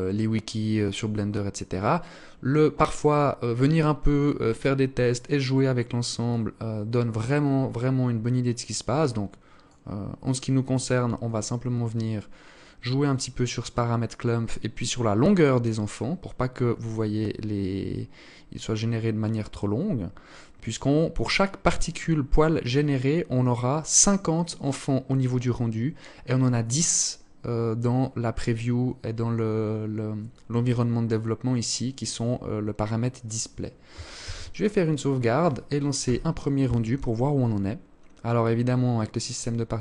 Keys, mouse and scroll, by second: 5.4 click, 10.4 click, 16.8 click, 33.4 ctrl+s.